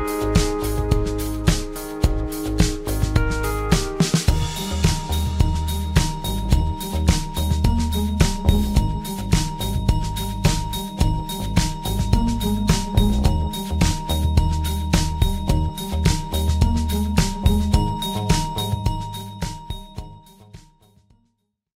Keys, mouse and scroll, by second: 1.3 alt+click, 1.9 alt+click, 2.4 alt+click, 3.1 alt+click, 3.5 ctrl+alt+click, 7.1 alt+click, 8.0 alt+click, 9.3 alt+click, 10.2 alt+click, 11.5 alt+shift+click, 14.6 alt+click, 15.6 alt+click, 16.6 alt+click, 17.0 alt+click, 17.5 alt+click, 18.0 alt+click, 18.5 alt+click, 18.9 alt+click, 19.5 alt+click, 20.7 alt+shift+click.